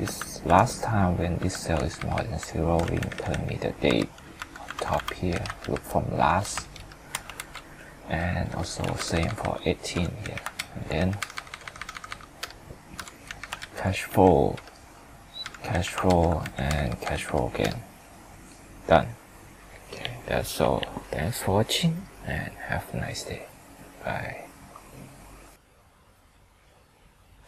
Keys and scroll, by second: 1.7 ctrl+Up, 3.9 F4, 6.8 ctrl+Return, 7.4 ctrl+c, 8.8 ctrl+v, 10.5 ctrl+Down.